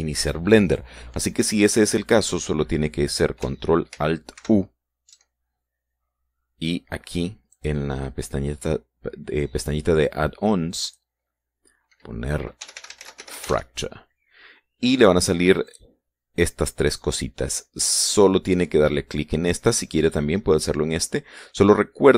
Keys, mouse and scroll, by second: 4.9 ctrl+alt+u, 8.1 click, 11.4 click, 13.2-14.3 typing, 16.2 click.